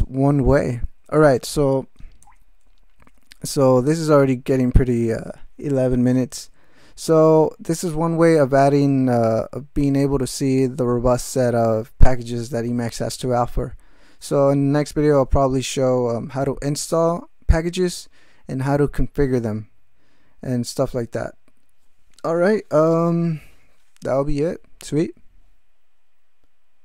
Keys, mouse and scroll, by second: 2.2 shift+,, 3.4 alt+shift+,.